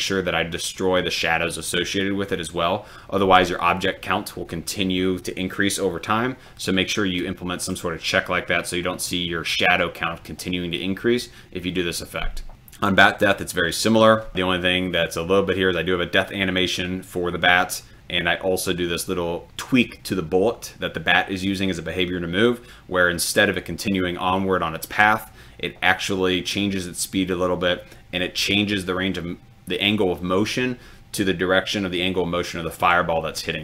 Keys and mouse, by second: 12.5 click.